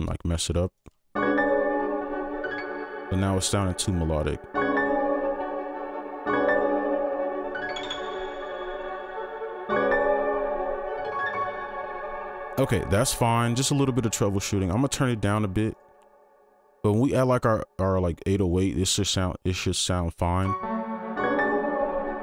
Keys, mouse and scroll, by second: 0.8 right click, 2.6 space, 3.4 space, 3.5 ctrl+click, 4.1 shift+Down, 4.3 space, 6.0 space, 12.0 space, 12.4 ctrl+click, 14.1-15.1 alt+scroll down 1, 15.3-15.6 alt+scroll up 1, 15.7 right click, 16.6 double click.